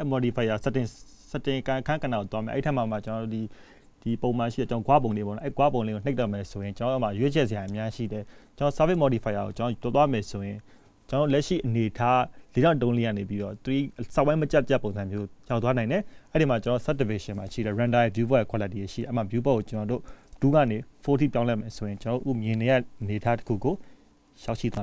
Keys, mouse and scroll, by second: 2.8 click, 3.7 middle click, 6.5 KP_0, 13.4 click, 14.7 g, 18.8 click, 22.3 click.